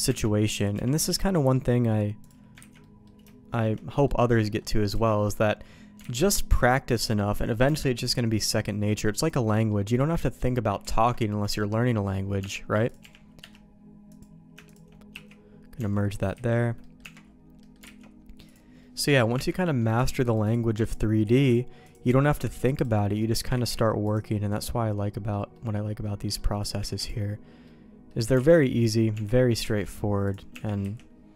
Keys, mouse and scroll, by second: 0.0 Tab, 0.7 g, 1.2 middle click, 2.2 click, 2.5 ctrl+x, 2.7 middle click, 3.9 middle click, 4.3 middle click, 4.9 Tab, 5.2 middle click, 6.0 alt+x, 6.9 click, 7.3 middle click, 7.6 Tab, 8.1 middle click, 9.2 click, 9.4 middle click, 10.3 ctrl+click, 10.7 ctrl+e, 12.3 Tab, 12.8 click, 13.0 g, 14.0 click, 14.6 shift+click, 15.1 1, 15.7 Tab, 16.3 a, 16.7 middle click, 17.0 Tab, 17.5 middle click, 17.9 alt+x, 18.4 click, 18.7 middle click, 19.3 Tab, 19.6 middle click, 20.4 click, 20.9 ctrl+click, 21.2 ctrl+e, 22.1 middle click, 22.7 click, 22.9 middle click, 23.5 ctrl+e, 24.4 middle click, 25.5 middle click, 26.0 middle click, 26.5 click, 27.0 ctrl+e, 27.6 middle click, 28.4 alt+a, 28.5 middle click, 29.1 Tab, 29.7 alt+x, 30.2 click, 30.5 Tab, 30.8 a.